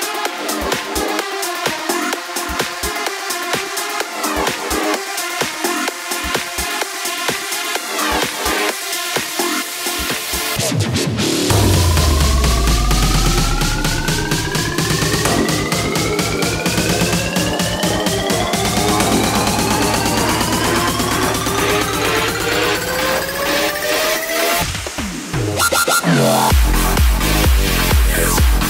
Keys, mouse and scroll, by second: 1.1-1.5 scroll up 3, 2.0-3.0 shift+middle drag, 3.0-5.6 scroll down 1, 5.6-6.8 scroll up 4, 9.4 click, 10.1-10.9 scroll down 2, 10.9 click, 12.5 scroll up 2, 16.1-17.5 scroll down 3, 17.5-21.2 scroll down 1, 21.2 click, 22.6 s, 25.2 ctrl+z, 26.2 KP_3, 26.8 scroll down 3, 27.0-28.6 middle drag.